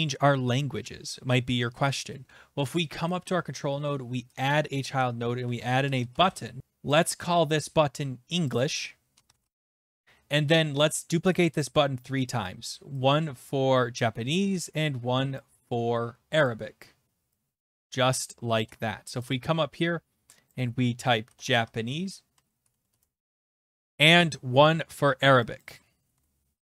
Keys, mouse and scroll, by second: 3.1 right click, 4.4 click, 5.1-6.6 typing, 6.9 click, 7.9 click, 7.9-10.1 typing, 8.5 click, 11.3 click, 11.3-12.1 typing, 11.6 click, 12.3 ctrl+d, 13.9 shift+click, 14.3 ctrl+d, 15.4 click, 15.5 ctrl+z, 16.4 click, 18.5 shift+click, 19.3 click, 20.5 click, 21.0-23.4 typing, 23.5 ctrl+v, 23.5 Return, 23.5 click, 23.9 click, 25.6 click, 25.9-26.7 typing.